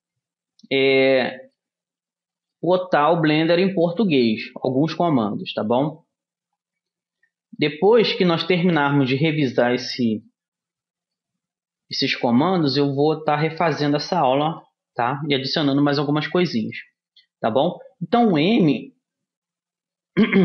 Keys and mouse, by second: 1.9-8.4 middle drag, 8.5-10.3 middle drag, 11.7 middle click, 12.6 middle click, 14.5-18.9 middle drag, 18.7 m.